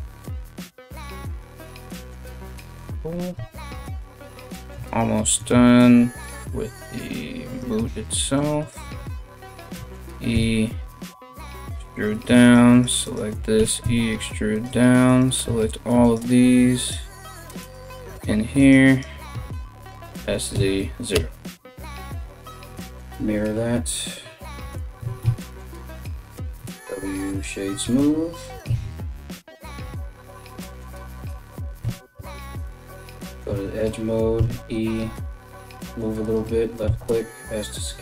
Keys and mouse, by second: 1.9 a, 2.9 a, 3.1 a, 3.6 right click, 3.7 middle click, 4.5 right click, 4.5-5.8 middle drag, 5.8 right click, 6.0 ctrl+middle click, 6.4 ctrl+right click, 6.5 ctrl+middle click, 7.0 ctrl+right click, 7.2 ctrl+middle click, 7.9 shift+right click, 8.1 shift+middle click, 8.2 shift+right click, 8.3-38.0 shift+middle drag, 9.1 e, 11.7 right click, 12.0 shift+right click, 12.3 shift+right click, 12.6 shift+right click, 13.2 e, 14.7 shift+right click, 15.6 ctrl+right click, 16.4 ctrl+right click, 17.2 ctrl+right click, 17.6 ctrl+right click, 18.2 ctrl+right click, 18.5 ctrl+right click, 19.4 s, 22.4 alt+x, 24.6 a, 24.8 w, 25.6 Tab, 26.1 w, 28.3 Tab, 29.4 right click, 30.2 w, 31.4 2, 32.2 alt+right click, 34.0 e, 36.4 s.